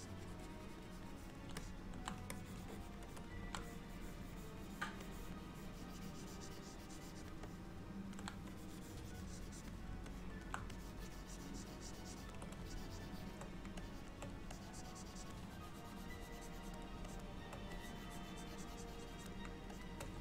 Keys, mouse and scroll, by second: 0.0 click, 1.0 click, 1.2 click, 1.7 middle click, 2.4-6.1 ctrl+click, 3.1 ctrl+click, 3.7 click, 4.1 click, 4.4 click, 4.7 click, 5.1 click, 5.6 click, 7.5 middle click, 8.6 click, 10.2 middle click, 10.9 ctrl+click, 11.1 ctrl+click, 12.7 shift+click, 13.4 shift+click, 13.9 ctrl+click, 14.6 click, 15.6 click, 17.1 shift+click, 17.5 shift+click, 17.9 click, 18.1 click, 18.3 shift+click, 19.8 shift+click.